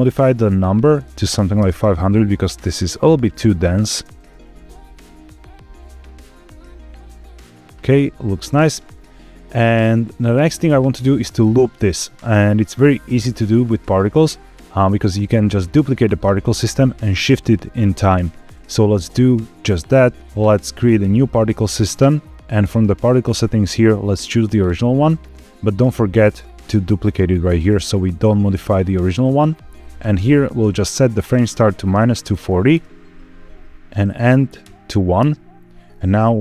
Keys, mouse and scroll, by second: 1.2 KP_0, 2.7-3.1 drag, 3.6 drag, 3.8 space, 8.4 space, 20.2 ctrl+z, 20.2 click, 20.9 click, 23.1-24.6 drag, 27.4 click, 31.1-32.6 drag, 33.8-35.1 drag, 35.7-36.4 scroll down 4.